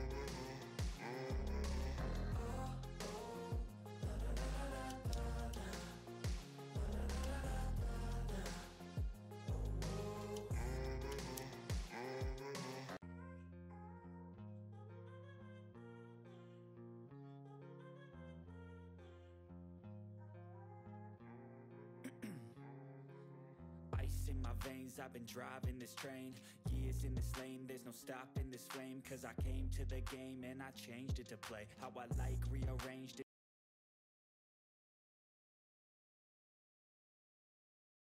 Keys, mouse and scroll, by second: 0.1-1.6 drag, 1.6-3.9 drag, 5.4 typing, 6.4 click, 7.9 ctrl+middle click, 8.7 click, 10.2 scroll down 1, 10.6 click, 11.3 ctrl+g.